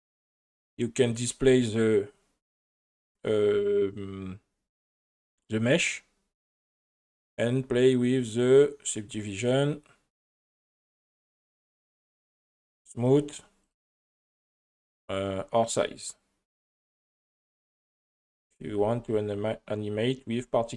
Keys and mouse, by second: 1.1 click, 8.9 click, 10.7-11.8 drag, 13.1 click, 13.7 click, 15.3-18.4 drag, 19.5 space, 19.5 click.